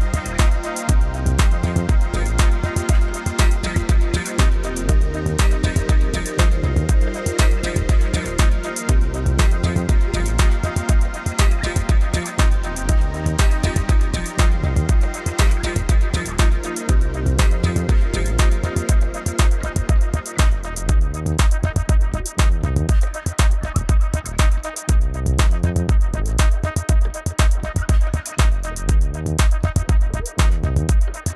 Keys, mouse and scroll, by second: 5.5 F9, 5.9 click, 6.3-9.4 typing, 6.5 click, 7.5 click, 8.5 click, 9.1 click, 10.1 click, 12.0 a, 13.1 click, 14.2 shift+click, 16.1 click, 17.4 KP_1, 18.6 click, 19.0-19.9 typing, 19.5 click, 19.8 click, 20.1 ctrl+KP_0, 20.5 click, 20.6 ctrl+=, 21.2 click, 21.4 Down, 22.0 click, 22.2 space, 22.2 click, 22.4 space, 22.6 v, 22.9 click, 23.5 Right, 24.0 Left, 24.3 click, 25.5 Right, 25.6 click, 25.7 space, 25.8 click, 25.9 space, 26.0 a, 26.2 click, 26.7 Down, 27.0 click, 27.2 space, 27.2 click, 27.4 v, 27.5 click, 27.6 Up, 27.9 click, 28.3 alt+shift+click, 29.1 click, 30.2 click, 30.5 Up, 30.6 click, 30.8 space, 30.9 click, 30.9 space, 31.2 space.